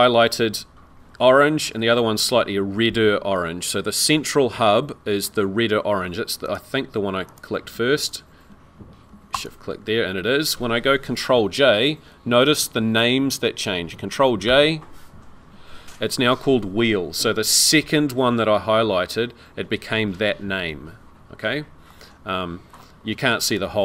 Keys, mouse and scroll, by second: 6.5 click, 7.3 click, 8.0 ctrl+click, 9.3 shift+click, 15.0 ctrl+j, 18.5-21.7 scroll down 2, 21.9 middle click, 23.5 right click.